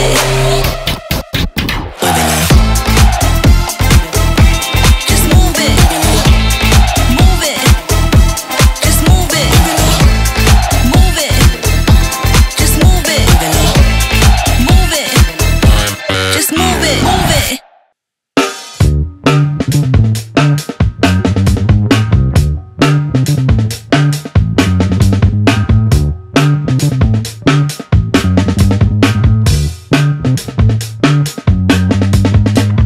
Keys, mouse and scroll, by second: 4.6-7.3 drag, 13.6 click, 16.8 click, 20.0 click, 22.6-27.7 drag, 29.5-31.1 typing.